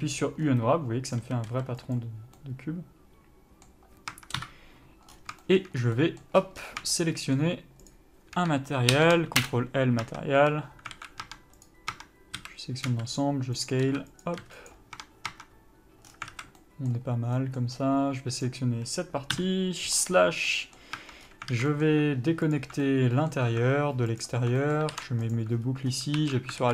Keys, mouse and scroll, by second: 1.5 a, 1.8 s, 2.7 middle click, 4.4 Tab, 4.7 KP_Divide, 5.4 scroll up 1, 5.7 shift+middle click, 6.1 scroll up 1, 6.2 middle click, 6.7-7.2 scroll up 2, 7.2 shift+middle click, 8.2 shift+click, 9.8 Return, 10.4 Tab, 10.7 a, 11.2 alt+a, 11.6 Tab, 12.0 click, 12.2 Tab, 12.7 a, 13.2 s, 14.0 click, 14.2 s, 15.2 Tab, 16.4 scroll down 1, 16.6 alt+a, 16.9 middle click, 18.1 scroll up 1, 18.7 click, 19.7 KP_Divide, 20.3-20.8 scroll down 1, 20.8 middle click, 21.3 Tab, 21.5 scroll up 1, 21.8 alt+a, 22.0 middle click, 22.9 alt+click, 23.2 middle click, 24.5 alt+click, 24.9 middle click, 25.6 ctrl+e, 25.9-26.5 scroll up 1, 26.5 alt+z.